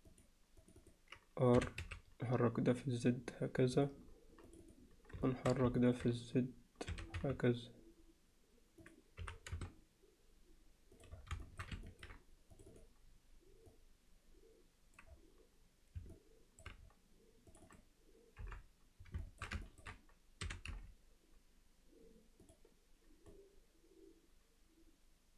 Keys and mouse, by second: 0.1 click, 0.7 click, 1.6 r, 4.7 click, 5.3 alt+shift+middle click, 5.8 ctrl+alt+middle click, 6.9 r, 9.2 g, 11.4 alt+shift+middle click, 11.9 ctrl+alt+middle click, 12.7 click, 13.7-15.0 drag, 16.1-16.6 middle drag, 17.5 click, 18.4 KP_7, 19.2 alt+shift+middle click, 19.7 ctrl+alt+middle click, 20.5 r, 23.4-25.3 drag.